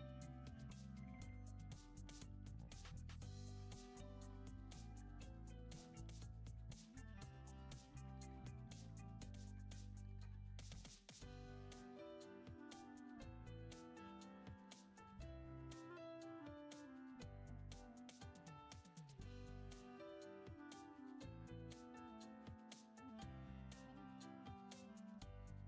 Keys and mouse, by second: 3.3 shift+middle click, 4.2 click, 4.8 ctrl+z, 5.1-6.2 shift+middle drag, 6.9 click, 7.7 click, 8.8 click, 10.3 ctrl+z, 10.6 ctrl+z, 12.9 click, 13.7 ctrl+z, 15.8 click, 17.1 click, 18.0 click, 19.4 click, 20.4 click, 21.5 shift+middle click, 24.5 alt+s.